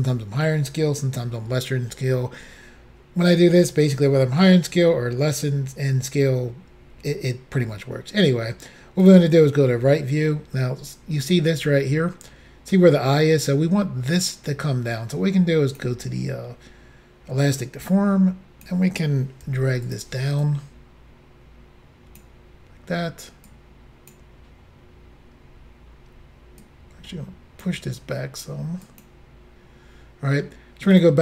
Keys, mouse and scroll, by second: 9.0 click, 10.0-10.3 scroll up 1, 15.7 click, 17.9 click, 19.5 f, 19.9 click, 20.4 click, 23.5 click, 26.6 click, 28.8 click, 30.9 click.